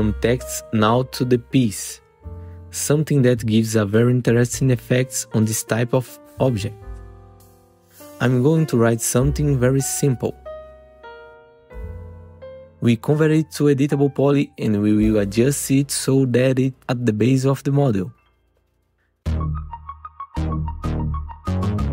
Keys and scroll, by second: 4.1-5.0 typing, 6.4 ctrl+t, 7.5 f, 8.5 Caps_Lock, 9.0 r, 10.5 w, 11.5 e, 15.4 w.